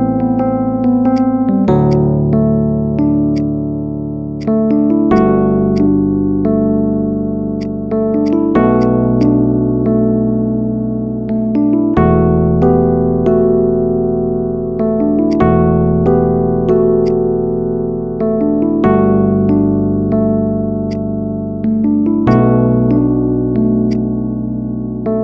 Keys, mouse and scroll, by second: 0.3-0.7 shift+middle drag, 0.7-1.1 scroll up 1, 1.1 click, 1.7-2.8 drag, 2.8-3.1 scroll up 1, 3.3-4.3 drag, 5.7-7.3 drag, 7.5 click, 8.7 drag, 9.1 click, 10.3 scroll up 3, 10.9 middle click, 11.2-11.5 scroll down 1, 12.9 Tab, 13.6 ctrl+a, 14.3 a, 15.1-16.7 drag, 16.9-18.4 right drag, 20.5 u, 21.7 Tab, 22.1 click, 22.4-23.8 middle drag, 23.8 click, 24.1 scroll down 2, 24.2-25.2 middle drag.